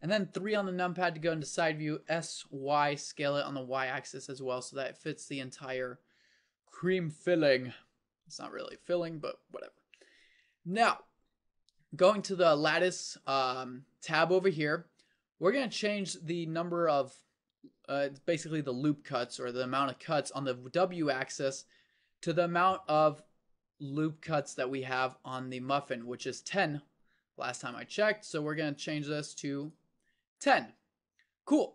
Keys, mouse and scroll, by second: 0.6 KP_3, 2.1 s, 7.5 KP_1.